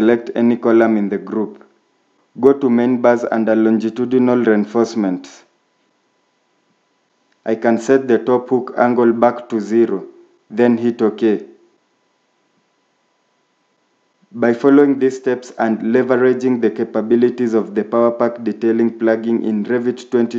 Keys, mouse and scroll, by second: 14.3-16.1 scroll down 1, 18.6 shift+middle click.